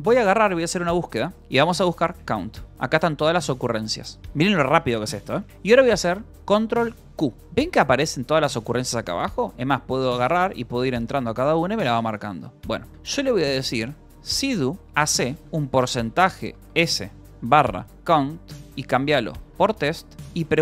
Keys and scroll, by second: 0.4-3.1 typing, 3.7 ctrl+n, 4.2 p, 7.4 ctrl+q, 7.4 j, 8.5 k, 9.0 j, 9.3 Return, 10.9 j, 11.0 Return, 11.9 Return, 13.0-20.6 typing.